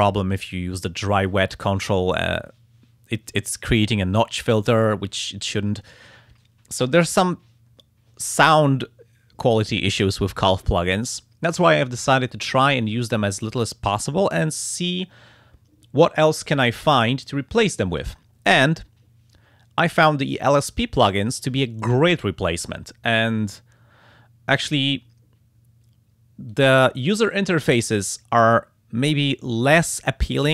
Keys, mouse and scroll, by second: 26.5 click.